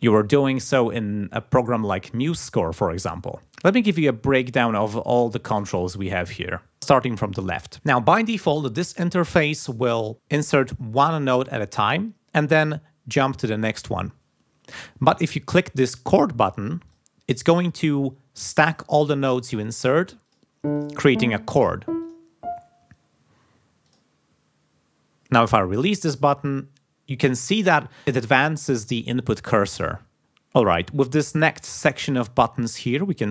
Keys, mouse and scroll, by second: 16.8 click, 20.2 click, 20.7 click, 21.4 click, 22.0 click, 23.8 click.